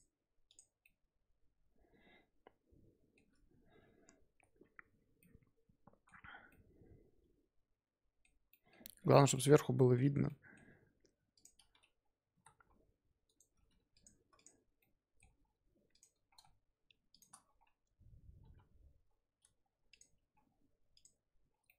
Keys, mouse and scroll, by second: 0.4 click, 0.7 scroll down 1, 0.8-3.9 middle drag, 5.2-6.2 middle drag, 6.2 scroll up 2, 6.5-9.0 middle drag, 9.0 KP_5, 9.3-11.3 middle drag, 11.3 click, 12.2 g, 13.5 g, 14.3 click, 14.8-15.4 middle drag, 15.4-15.9 scroll down 3, 15.9 click, 16.0-17.1 scroll up 1, 17.1 shift+click, 17.4-18.4 scroll up 1, 18.4 KP_1, 19.0 scroll up 3, 19.5-19.9 scroll down 2, 19.9 click, 20.4-20.9 scroll down 2, 20.9 click, 21.6 middle drag.